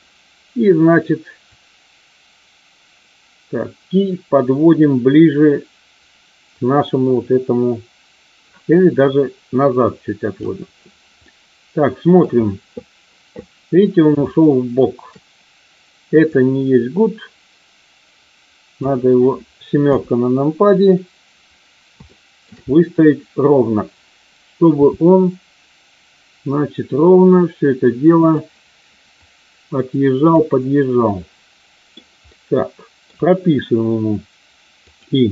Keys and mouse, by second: 1.5-10.4 drag, 11.1-12.2 middle drag, 14.2-14.7 shift+middle drag, 16.1-18.9 drag, 19.7 KP_7, 22.0-22.4 shift+middle drag, 24.7 r, 29.2-30.4 drag, 31.0-31.9 middle drag, 32.1-33.0 middle drag, 34.9 click.